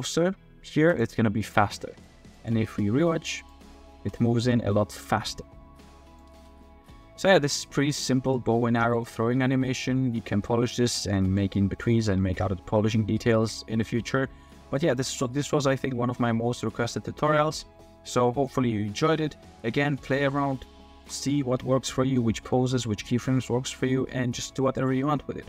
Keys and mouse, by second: 1.7-2.2 drag, 2.4 click, 2.6 space, 3.4 click, 3.9 space, 4.1-6.2 drag, 6.3 space, 6.9 space, 8.3-8.9 middle drag, 9.5-9.8 drag, 11.2 middle click, 14.5-15.3 middle drag, 18.5-21.1 middle drag.